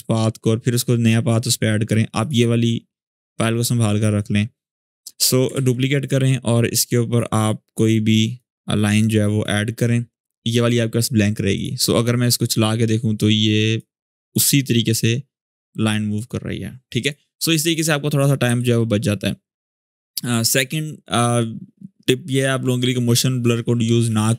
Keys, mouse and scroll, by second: 5.2 click, 5.3 ctrl+d, 6.8 click, 7.9-13.6 drag.